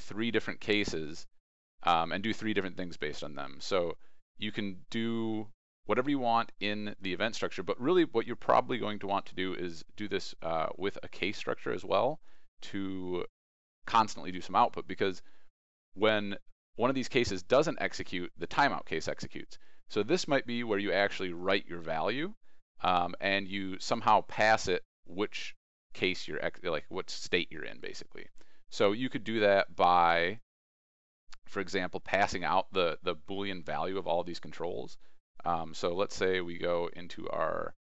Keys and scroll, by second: 0.3 ctrl+e, 28.1 ctrl+e.